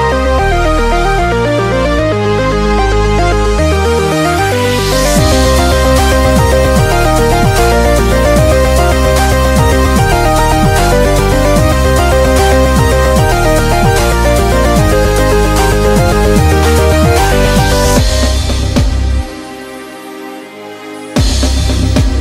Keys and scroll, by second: 3.9-4.9 typing, 5.0 Return, 6.2 shift+super+i, 8.0 super+d, 10.1 super+=, 10.3 super+=, 13.2 super+=, 13.4 super+=, 13.5 super+=, 16.2 b, 17.3-19.1 typing.